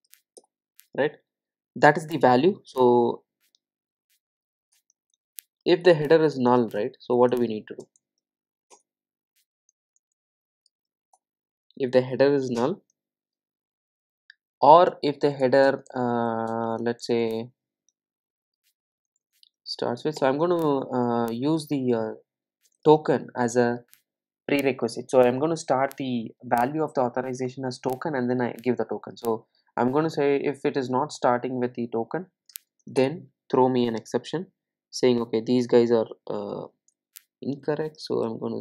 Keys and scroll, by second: 8.8 Return, 20.2 Return.